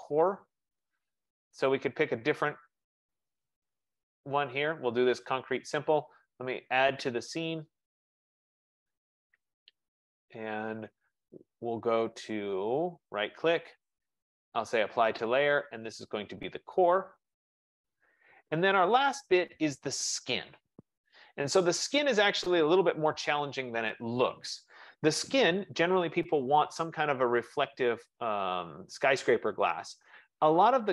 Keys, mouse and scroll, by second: 0.5 scroll up 4, 0.6 middle click, 0.6 scroll, 0.8 scroll up 7, 0.8-1.7 scroll, 3.4 click, 5.2 right click, 7.8 click, 13.3 right click, 17.2 click, 29.6 click.